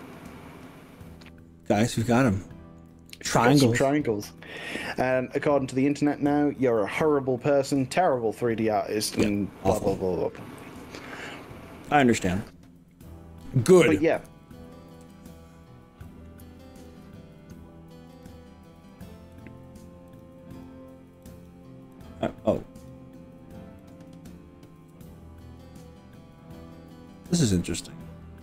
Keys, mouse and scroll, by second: 0.1 middle click, 0.7 scroll down 2, 1.1-2.9 middle drag, 3.1 middle click, 3.9 middle click, 6.1 g, 6.8-12.3 middle drag, 8.7 g, 14.2 KP_1, 15.0 KP_3, 16.1 click, 18.3 click, 19.5 click, 20.1 click, 20.6 click, 21.3 click, 22.1 click, 22.9 click, 23.9 click, 25.0 g.